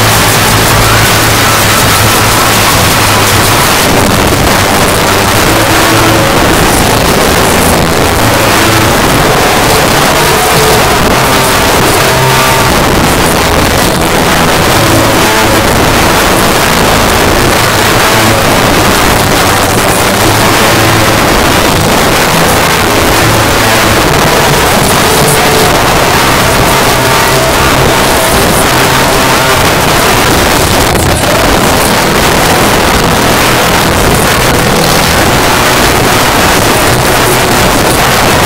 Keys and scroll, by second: 3.7 Page_Down.